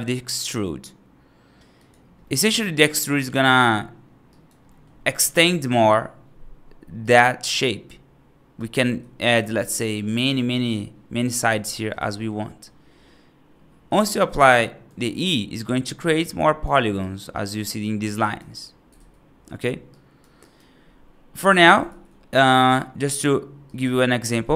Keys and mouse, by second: 2.1 middle click, 2.7 right click, 3.3 middle click, 4.2 right click, 4.5 middle click, 6.8-8.4 right drag, 8.7 e, 11.3 e, 13.7 e, 14.8 ctrl+z, 15.9 right click, 16.9 right click, 17.2 right click, 18.1 right click, 18.8 ctrl+z, 19.8 right click, 20.3 right click, 21.7 ctrl+z, 22.5 middle click.